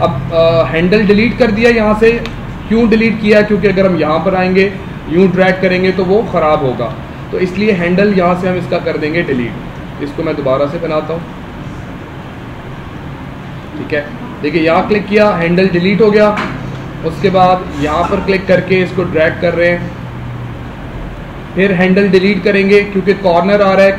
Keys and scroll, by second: 2.1 space, 6.7 ctrl+z, 15.4 space.